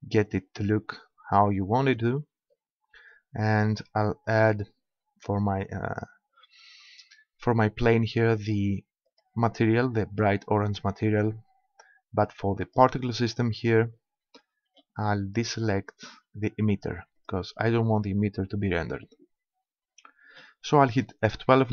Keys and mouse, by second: 1.5-4.3 middle drag, 4.3-6.0 drag, 8.4-10.1 drag, 12.7-14.6 drag, 14.6-17.2 middle drag, 17.2-18.9 drag, 19.5-21.7 middle drag.